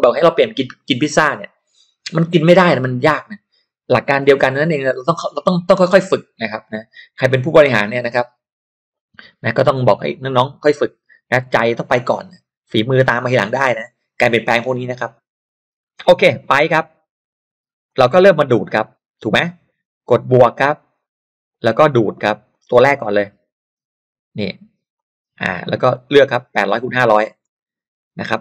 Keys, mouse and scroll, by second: 17.8 click, 20.5 click, 22.4 click, 24.9 click, 25.9 click, 27.4 click.